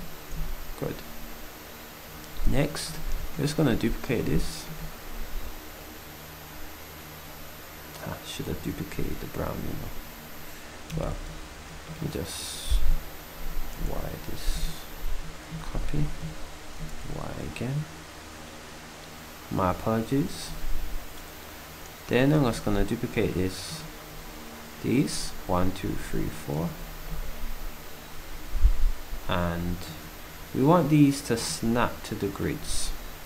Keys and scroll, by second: 13.8 y, 15.5 c, 16.8 y.